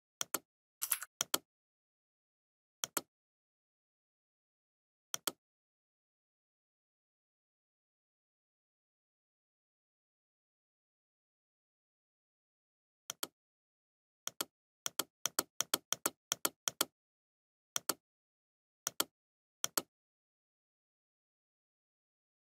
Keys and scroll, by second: 2.1 ctrl+z.